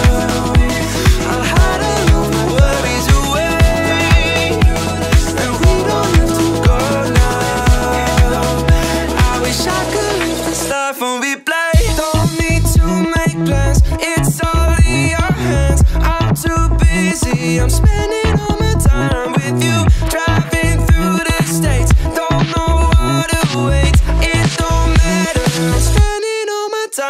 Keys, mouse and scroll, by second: 0.0-1.6 typing, 3.3 BackSpace, 3.8 BackSpace, 4.5 KP_1, 5.4 click, 5.9-7.2 middle drag, 7.6 click, 8.2-8.6 scroll up 1, 8.6-9.0 scroll down 1, 9.0 a, 10.1 e, 12.0 right click, 12.7 shift+Tab, 13.3 shift+Tab, 14.3 e, 15.5 click, 16.0 Tab, 16.3-16.7 middle drag, 16.7-17.0 scroll down 1, 17.0 right click, 17.9 scroll down 1, 18.2-19.3 middle drag, 19.3 scroll down 1, 19.8-20.3 middle drag, 21.3 shift+Tab, 21.9-23.2 middle drag, 23.5 click, 23.8 scroll down 1, 24.7 ctrl+a, 25.7 click.